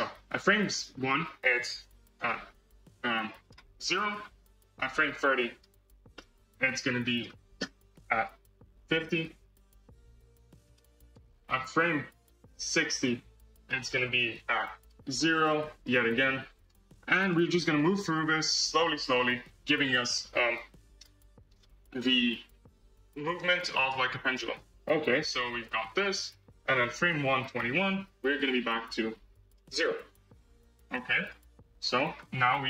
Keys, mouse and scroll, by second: 0.6-2.0 middle drag, 2.0-3.8 right drag, 3.8-5.4 middle drag, 5.4-6.1 drag, 6.1-8.0 middle drag, 8.0-9.8 drag, 10.7-12.6 right drag, 12.6 click, 13.6 middle click, 14.5-16.6 drag, 17.1-18.7 right drag, 18.7-23.3 drag, 23.7-25.5 right drag, 25.5-28.0 drag, 28.3-29.5 drag, 30.7-32.4 right drag, 32.4 space.